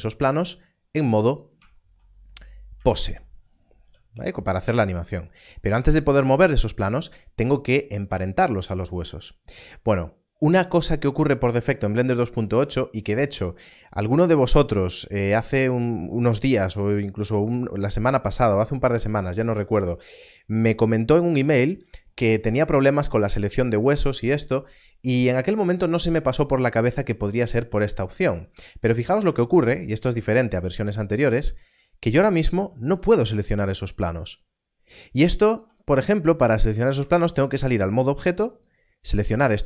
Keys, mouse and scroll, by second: 0.3 click, 1.3 right click, 2.5 scroll down 1, 3.4 click, 3.7 click, 4.4 right click, 28.7 right click, 28.8 scroll up 1, 31.5 click, 36.9 ctrl+Tab, 38.5 click.